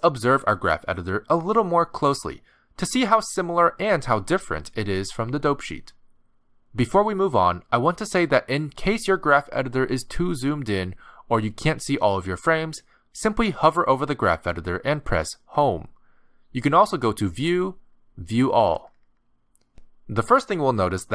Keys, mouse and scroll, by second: 1.2 space, 6.1 click, 12.4-12.9 scroll up 4, 12.9 middle click, 13.6-14.2 scroll up 4, 14.2 middle click, 16.0 Home, 17.1 click.